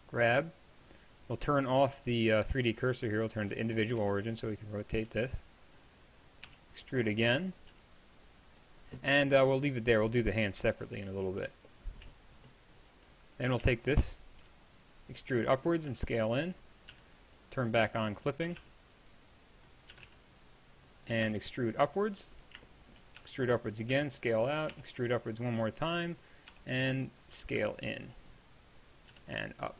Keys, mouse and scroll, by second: 4.0 r, 5.0 g, 6.5 e, 7.7 g, 11.8-13.5 middle drag, 13.5 a, 13.6 b, 14.4 e, 15.9 s, 16.9 g, 18.5 g, 21.3 e, 23.4 e, 23.9 s, 24.7 e, 26.5 e, 28.4 s, 29.1 g.